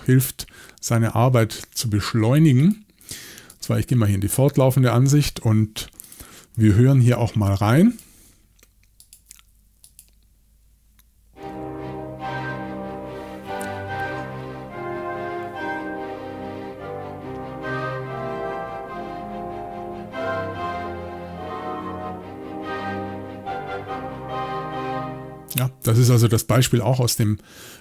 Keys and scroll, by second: 6.6 x, 6.7 x.